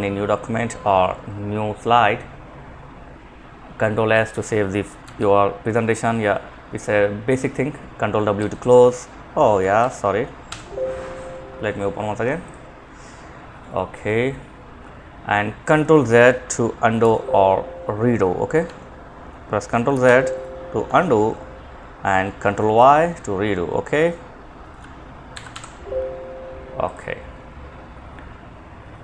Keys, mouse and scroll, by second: 3.3 Escape, 4.2 ctrl+s, 7.6 ctrl+w, 9.0 alt+f, 9.7 alt+1, 11.7 click, 16.2 ctrl+z, 17.9 Escape, 20.1 Escape, 24.7 alt+1, 26.1 click.